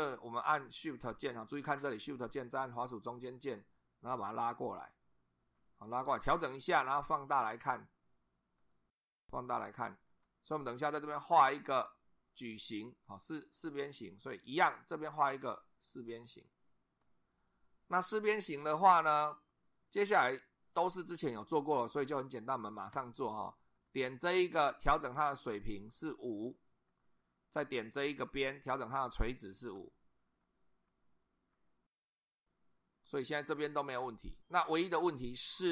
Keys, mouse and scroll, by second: 3.1 shift+click, 6.3 shift+click, 7.1-7.5 scroll up 2, 8.6 shift+middle click, 10.1 shift+click, 14.8 click, 15.9 click, 17.0 click, 22.9 Escape, 23.9 click, 25.4 click, 25.9 5, 26.9 click, 28.1 click, 29.3 click, 29.7 5, 30.4 click, 30.9 click, 31.5 click, 32.3-34.0 drag.